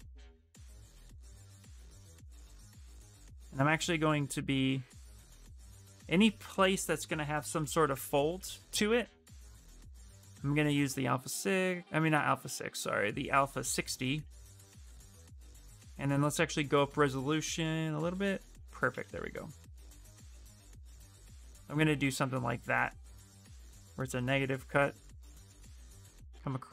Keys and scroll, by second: 3.4 ctrl+z, 7.6 ctrl+z, 8.1 ctrl+z, 10.8 space, 18.9 s, 21.7 ctrl+z.